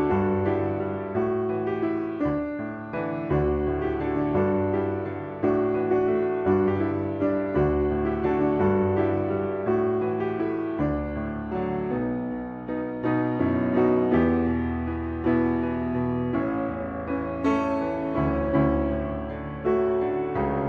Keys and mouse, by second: 1.6 shift+middle click, 2.2 click, 2.4 click, 5.6 click, 5.9 click, 7.9 ctrl+r, 11.1 click, 11.5-12.8 drag, 14.9 click, 15.1-17.7 drag.